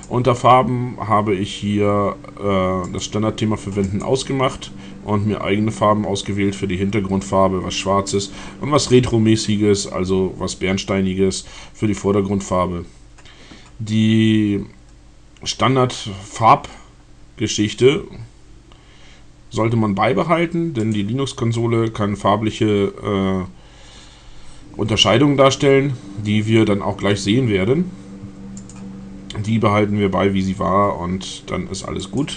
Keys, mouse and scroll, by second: 0.0 click, 2.6 click, 3.9 click, 20.7 click, 28.7 click, 32.0 click.